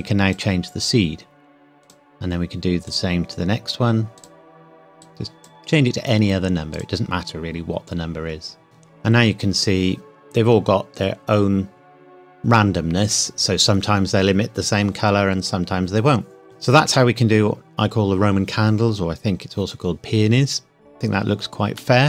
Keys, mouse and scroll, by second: 0.0 click, 16.4-16.8 scroll down 1, 21.8 middle click.